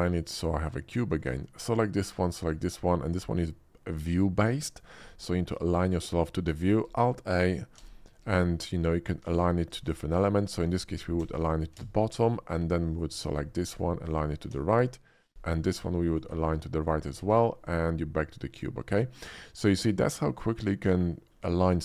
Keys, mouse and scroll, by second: 0.4 shift+middle click, 1.1 shift+click, 2.0 shift+click, 2.4-4.8 shift+middle drag, 5.2-6.5 middle drag, 7.0 alt+a, 7.6 alt+a, 9.7 ctrl+z, 11.1 alt+a, 12.9 click, 13.2 shift+click, 14.1 alt+a, 14.8 middle click, 15.5 ctrl+z, 15.5 middle click, 16.1 click, 16.4 shift+click, 17.2 alt+a, 17.5-18.5 middle drag, 19.1-21.3 middle drag.